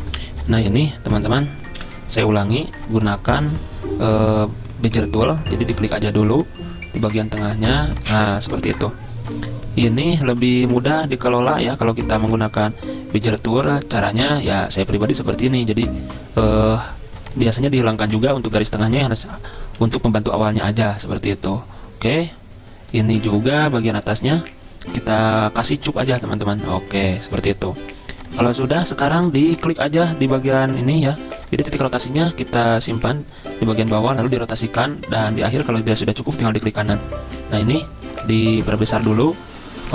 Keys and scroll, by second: 1.8 Delete, 3.3 Delete, 19.8 ctrl+z, 23.2 ctrl+z.